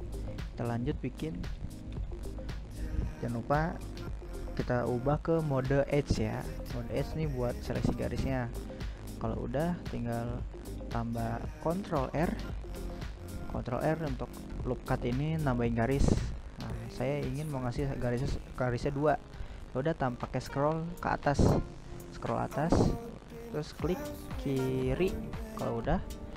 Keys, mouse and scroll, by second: 2.7 click, 3.6 right click, 4.1 right click, 4.4 right click, 4.9 middle click, 5.3 scroll up 1, 5.4 scroll down 2, 5.7-6.2 scroll up 1, 6.2-8.3 scroll down 1, 8.3 ctrl+r, 23.8 s.